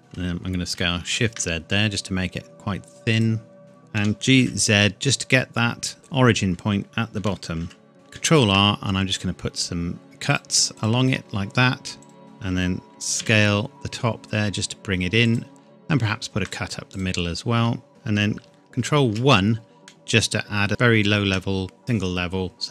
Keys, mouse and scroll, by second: 1.2 shift+z, 3.1 click, 3.6-4.0 scroll up 1, 4.0 g, 4.4 z, 6.0-7.2 scroll up 1, 7.2 g, 7.6 z, 7.9 scroll up 1, 8.2 ctrl+r, 8.6-10.2 scroll up 1, 10.3 click, 13.2 s, 15.2 click, 16.0 ctrl+r, 16.5 click, 17.6 Tab, 17.9 middle click, 19.0 ctrl+1, 19.8 middle click, 20.7 Tab.